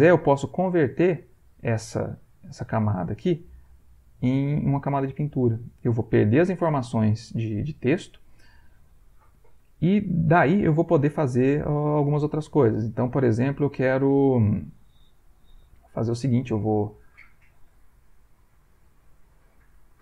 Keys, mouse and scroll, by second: 0.1-6.4 right drag, 16.7 shift+click, 18.4-20.0 drag.